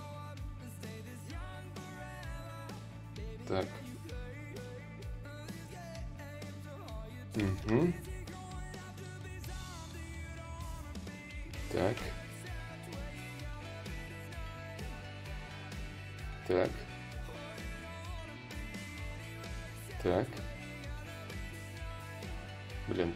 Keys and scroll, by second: 22.4 s.